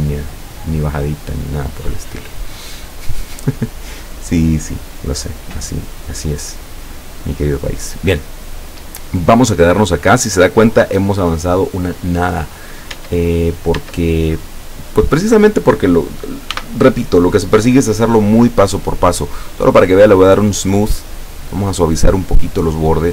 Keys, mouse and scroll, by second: 0.3 scroll down 1, 0.6-3.8 middle drag, 4.8 scroll up 1, 5.3 scroll down 2, 6.0-7.8 middle drag, 8.0-8.9 middle drag, 13.0 Tab, 13.8 Tab, 16.6 t, 20.9 click, 21.9-23.1 drag.